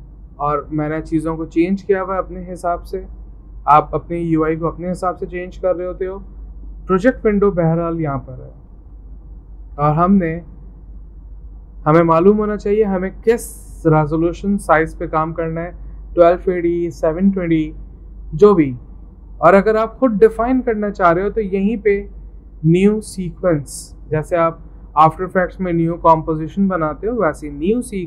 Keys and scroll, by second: 8.8 alt+Tab, 9.6 alt+Tab, 20.2 alt+Tab.